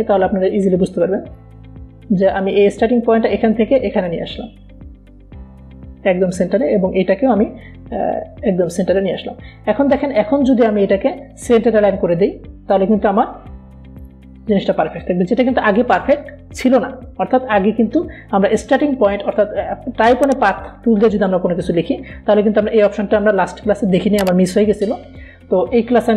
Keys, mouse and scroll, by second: 0.1-11.2 drag, 19.1 click.